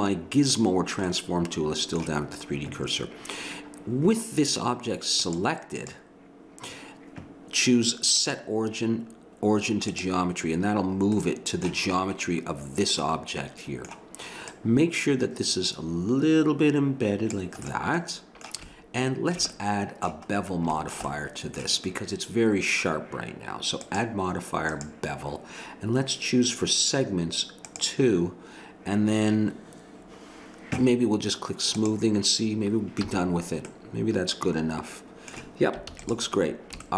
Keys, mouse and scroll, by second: 1.1 middle click, 5.2-7.6 drag, 8.2-10.0 drag, 11.2-14.5 middle drag, 14.5-16.3 drag, 17.6-23.2 middle drag, 23.8-26.6 drag, 27.7-29.4 drag, 29.9-31.8 middle drag, 31.8-33.0 drag, 33.0 a, 33.6-35.2 middle drag, 35.8 ctrl+s.